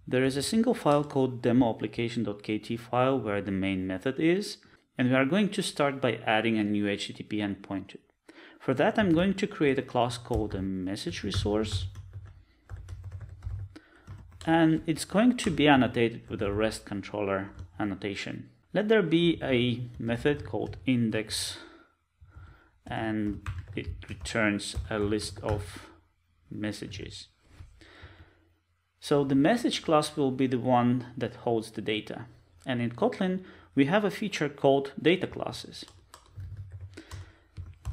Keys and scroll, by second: 12.6 Return, 17.5 Return, 37.1 Return.